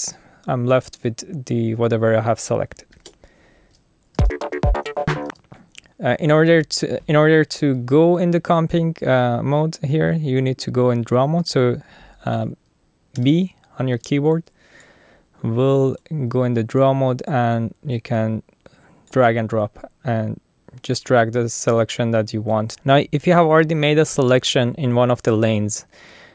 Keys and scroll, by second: 2.9 alt+super+u, 4.2 space, 13.2 b.